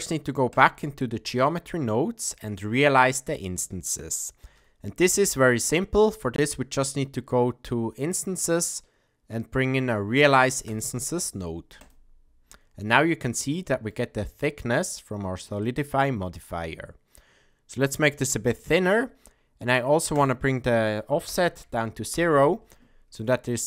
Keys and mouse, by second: 0.5 click, 1.5 middle click, 4.4 shift+a, 13.3-13.9 shift+middle drag, 15.6-19.0 drag, 20.1-22.7 drag.